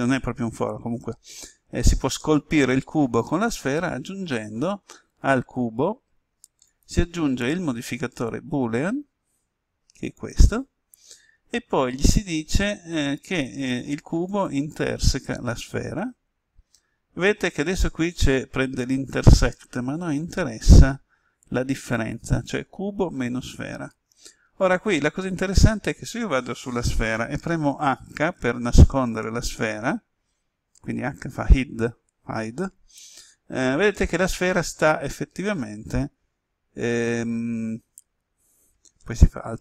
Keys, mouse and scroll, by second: 5.1 right click, 6.6-20.5 drag, 25.2 right click, 29.0 h, 36.3 g.